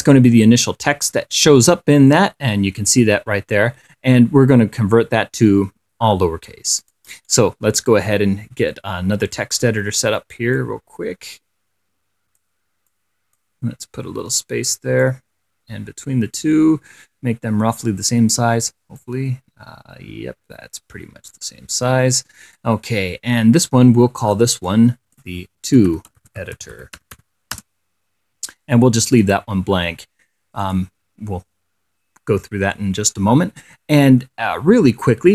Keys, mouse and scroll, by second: 1.8 click, 2.3 click, 7.1 click, 7.6-9.8 right drag, 10.8-12.9 drag, 13.2 click, 15.3-18.3 drag, 19.3-23.1 drag, 24.5 click, 24.9 click, 25.8-27.9 typing, 30.9 click.